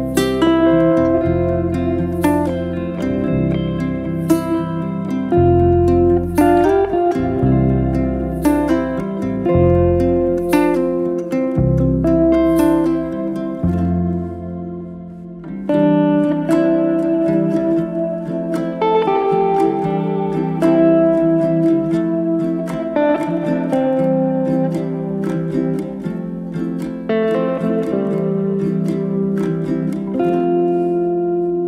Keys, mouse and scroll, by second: 0.8-1.6 middle drag, 1.6 shift+a, 3.2 middle click, 3.7 g, 4.6-6.0 middle drag, 6.0 g, 6.7-8.2 middle drag, 8.3-10.3 drag, 10.3-11.8 middle drag, 11.8-14.0 drag, 14.0 g, 15.0 click, 15.9 g, 18.1 g, 20.0 g, 23.1 click, 23.9-25.4 drag, 26.9 g, 29.0 click, 29.7 r, 30.8 z, 30.9 scroll down 1, 31.2-31.5 middle drag, 31.5-31.6 scroll down 2.